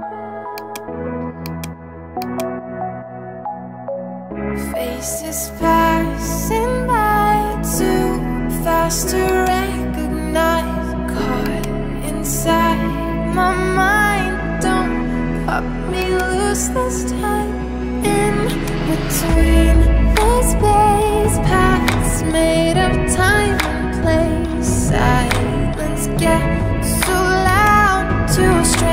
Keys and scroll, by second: 13.3 alt+BackSpace, 19.5 ], 25.3 [.